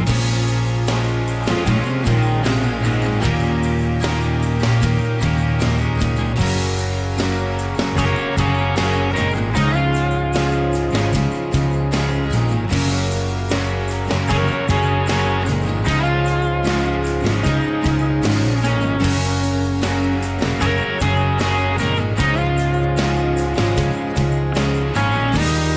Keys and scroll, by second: 17.3 b, 17.9 Escape, 18.0 Escape, 18.1 Escape, 23.3 b.